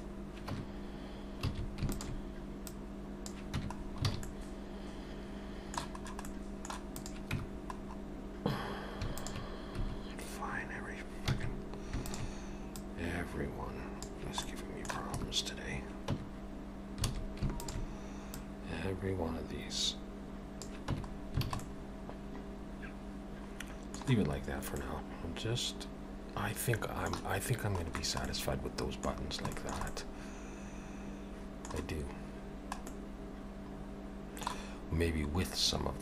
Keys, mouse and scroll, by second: 0.5 Tab, 1.5 alt+a, 1.9 alt+shift+click, 2.7 click, 3.6 Tab, 3.8 scroll down 4, 4.1 alt+a, 4.2 middle click, 6.0-6.8 scroll up 2, 6.3 middle click, 6.9 click, 7.4 Tab, 7.8-8.5 scroll up 2, 9.1 alt+shift+click, 11.3 alt+a, 12.0 alt+shift+click, 12.8 click, 14.5 middle click, 15.1 Tab, 16.1 Tab, 17.1 alt+a, 17.6 alt+shift+click, 18.4 click, 20.9 Tab, 21.1 scroll down 3, 21.5 alt+a, 21.6 middle click, 24.2-24.6 scroll down 3, 24.8 middle click, 27.6-28.0 scroll up 2, 28.3 middle click, 29.2 scroll down 2, 29.6 shift+middle click, 29.9 middle click.